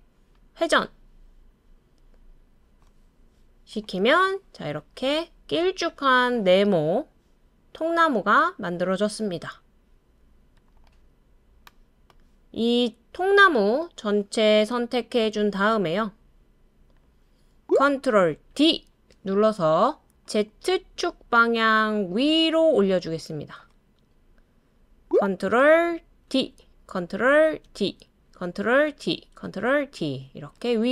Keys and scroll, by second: 18.5 super+d, 26.3 super+d, 27.6 super+d, 28.8 super+d, 29.8 super+d.